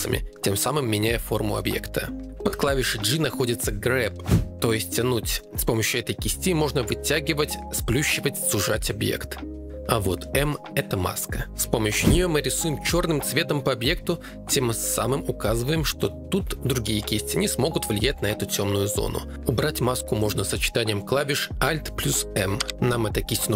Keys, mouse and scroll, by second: 4.0 g, 4.9 f, 5.1 click, 6.0 click, 8.5 click, 9.3 click, 9.7 ctrl+Tab, 10.4 m, 15.2 g, 15.3 f, 17.9 click, 22.6 alt+m.